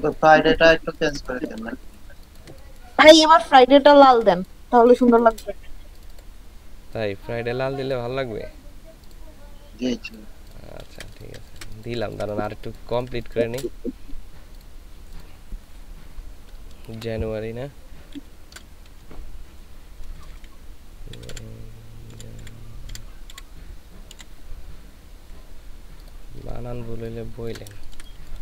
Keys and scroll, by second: 10.8 ctrl+space, 11.3 ctrl+space, 18.2 shift+j, 18.9 \, 20.0-24.1 typing, 27.8 ctrl+shift+space.